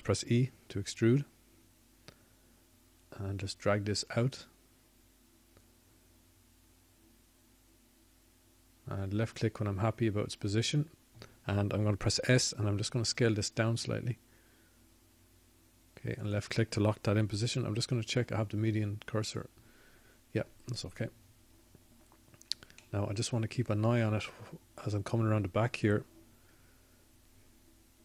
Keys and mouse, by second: 0.1 click, 6.3 e, 16.7-18.1 drag, 18.1 s, 22.4-24.4 drag, 23.4 ., 25.2 ..